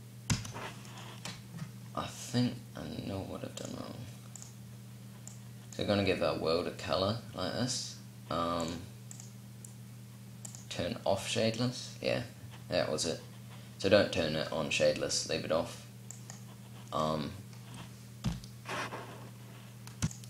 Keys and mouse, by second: 3.3-6.0 drag, 8.3-11.6 drag, 15.8-17.9 drag, 17.9 p, 19.7 p.